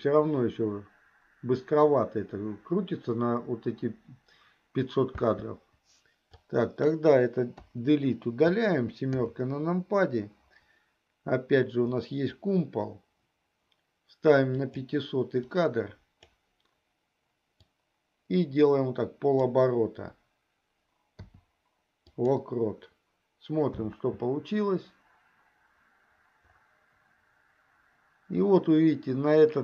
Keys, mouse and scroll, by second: 5.3 space, 6.3-6.9 drag, 7.8 Delete, 9.4 KP_7, 14.8 click, 15.8 click, 17.5 click, 18.1-19.7 drag, 21.1 i, 23.9 space.